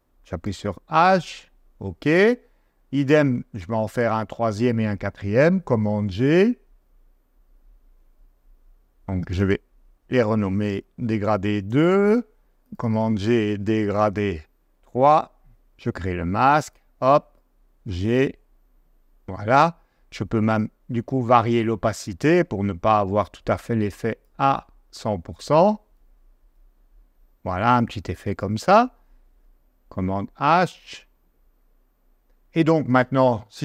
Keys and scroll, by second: 0.4 h, 5.7 super+g, 10.7 super+c, 10.9 super+v, 11.2 BackSpace, 11.6 2, 12.0 Return, 13.9 super+v, 14.7 BackSpace, 15.1 3, 17.6 g, 29.4 super+h, 31.4 super+h.